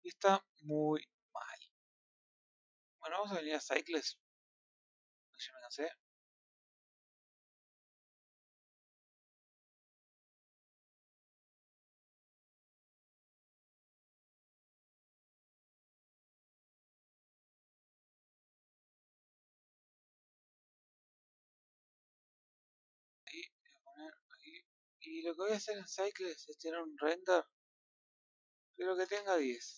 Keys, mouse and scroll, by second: 4.6-6.6 drag, 26.7 click, 29.3-29.7 drag.